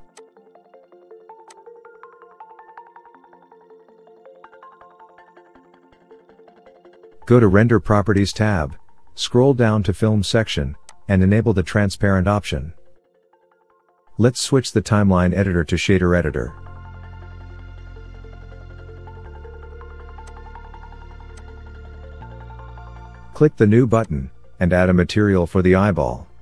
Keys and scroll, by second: 22.5 n.